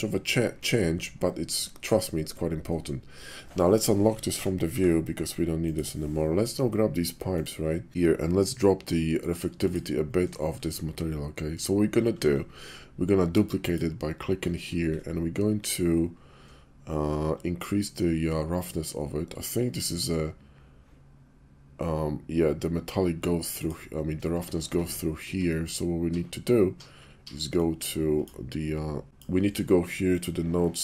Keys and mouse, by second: 4.2 Page_Down, 4.6 Page_Down, 7.2 click, 9.6 click, 13.6 click, 14.0-17.3 middle drag, 23.6 click, 29.0 click, 30.1-30.8 drag.